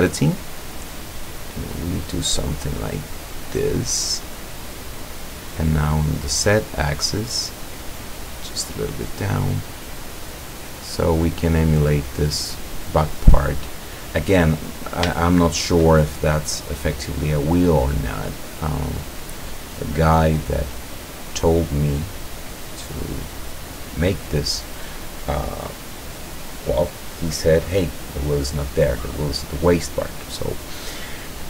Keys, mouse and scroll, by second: 0.5-5.3 drag, 6.3-9.5 drag, 10.1 scroll down 1, 10.5-11.8 drag, 14.7 scroll down 1, 15.2 shift+click, 16.1-16.6 shift+scroll up 1, 16.9 scroll down 1, 18.2 click, 19.0 click, 20.0-21.0 drag, 21.9-23.0 drag, 23.2-24.4 drag.